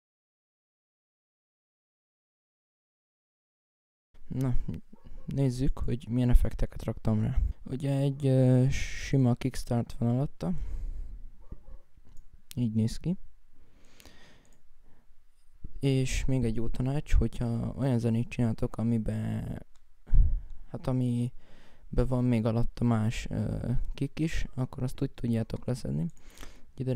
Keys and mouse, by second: 5.9 right click, 7.6 right click, 14.2 Escape, 21.6-22.8 right drag, 23.6 F1, 24.0 F1, 24.0 right click, 24.3 right click, 24.5-26.9 right drag.